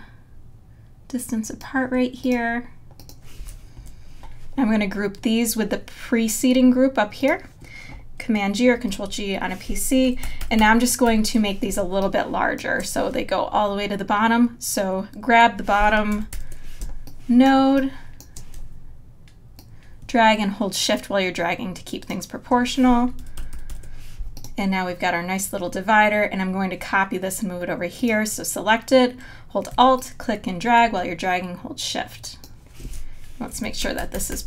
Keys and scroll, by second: 3.8 Down, 8.7 super+g, 10.3 super+-, 11.0 super+-, 11.7 space, 16.3 super+=, 16.8 space, 23.4 super+-, 33.9 super+=.